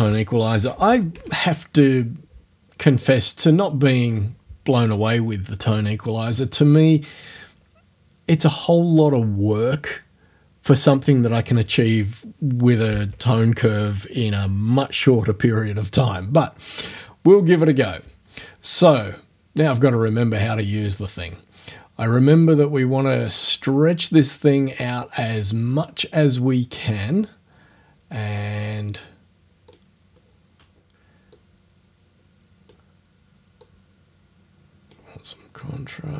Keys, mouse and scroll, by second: 0.4-1.7 typing, 3.1 click, 4.1 click, 4.3-15.5 middle drag, 17.4 click, 28.2 click, 29.7 click, 31.4-32.9 drag, 33.6-35.1 drag, 35.6-36.1 drag.